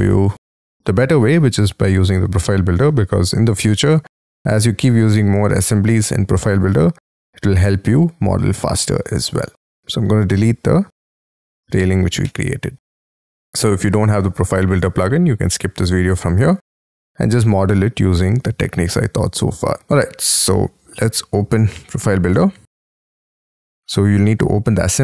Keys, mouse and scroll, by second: 0.4 shift+middle click, 0.8 shift+scroll down 1, 1.2-1.8 scroll up 8, 2.9 middle click, 3.4 scroll down 6, 12.3 Delete, 13.7 Delete.